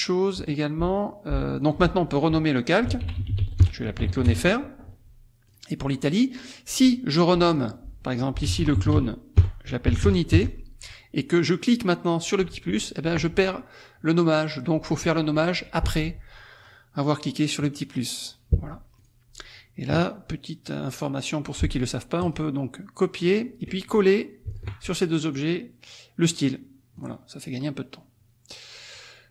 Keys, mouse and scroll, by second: 0.3 click, 1.5 click, 2.7-4.0 typing, 4.3 Return, 5.5 click, 7.4 click, 8.2-10.6 typing, 12.4 click, 16.6 click, 17.8 click, 19.0 click, 22.3 click, 23.3 click, 23.9 click, 24.5 shift+click, 25.4 click, 26.3 click, 27.0 click.